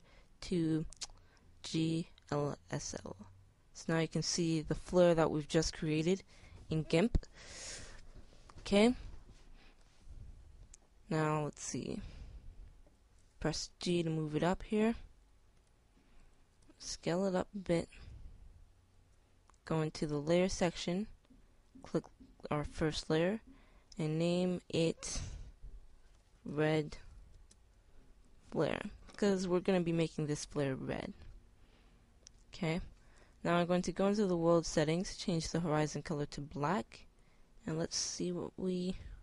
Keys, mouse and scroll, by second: 1.3-3.9 middle drag, 4.0-6.0 middle drag, 10.6-12.0 middle drag, 13.8 g, 16.0-17.1 drag, 17.1 s, 25.1-34.5 middle drag.